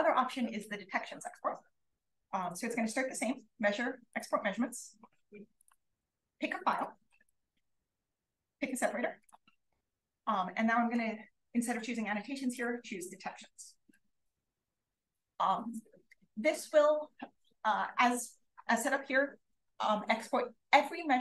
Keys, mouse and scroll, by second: 5.5 click, 6.6 click, 8.4 click.